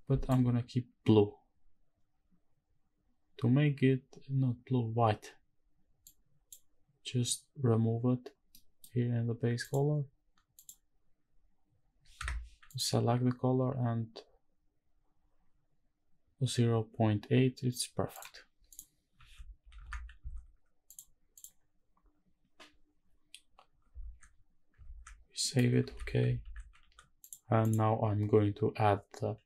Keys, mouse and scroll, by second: 1.8-4.1 scroll down 1, 4.1-6.1 scroll down 2, 6.1-6.6 drag, 8.5 middle click, 9.9-11.4 scroll up 1, 11.4-12.1 drag, 11.4-11.8 scroll up 1, 12.7 click, 18.7 click, 19.3 ctrl+s, 19.8 shift+`, 21.4 click, 23.9 ctrl+s, 25.0 ctrl+s, 25.4 middle click, 26.0 shift+`, 27.6 click.